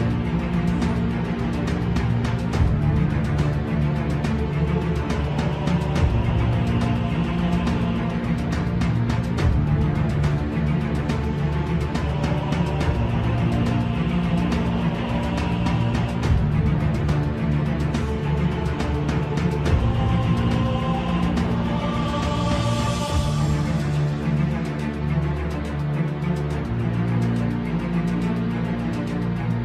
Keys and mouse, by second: 3.3 ctrl+right click, 4.6 s, 6.3 s, 11.3 click, 12.6 KP_3, 15.2 e, 18.5 s, 20.0 e, 22.2 s, 24.6 middle click.